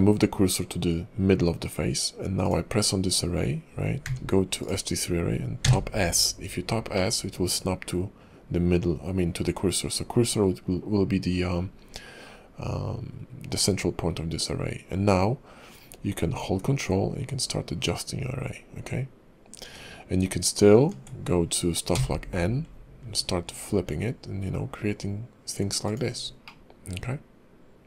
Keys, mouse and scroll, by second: 2.4 click, 4.0 q, 7.0 middle click, 10.8-11.5 scroll up 4, 11.5 scroll down 1, 11.7-14.1 scroll down 3, 14.1-14.8 scroll down 1, 26.4 middle click.